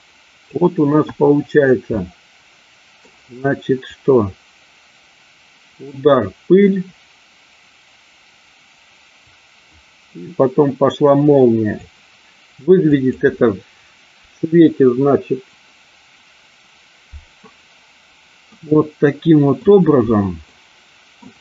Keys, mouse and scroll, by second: 1.0 KP_1, 2.0-3.1 middle drag, 3.9-11.8 drag, 15.7 click, 18.6-19.7 middle drag, 20.6-21.3 middle drag.